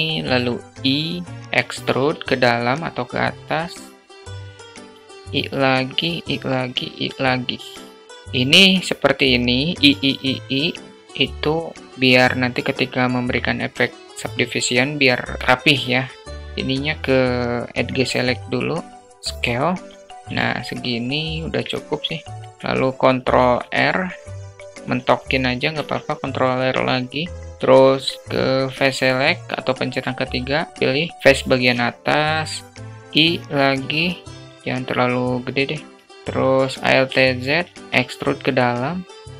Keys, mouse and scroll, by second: 1.4 e, 3.7 i, 4.8 i, 5.5 i, 7.4 alt+middle click, 15.5 alt+middle click, 16.4 alt+middle click, 17.1 click, 17.9 click, 19.1 s, 20.2 alt+z, 20.2 middle click, 21.3 middle click, 22.1 alt+middle click, 24.4 ctrl+r, 24.7 ctrl+r, 26.4 `, 27.9 3, 29.2 click, 32.3 i, 36.1 alt+shift+z, 36.1 alt+shift+middle click, 37.2 e.